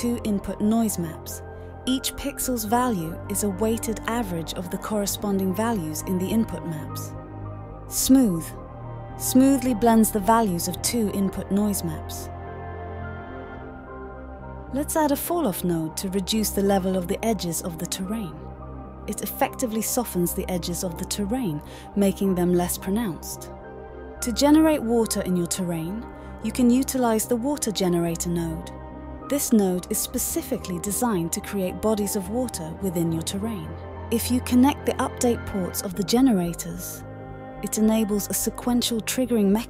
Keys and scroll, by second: 7.4 d, 14.0-14.8 typing, 15.0 Return, 29.8-30.8 typing.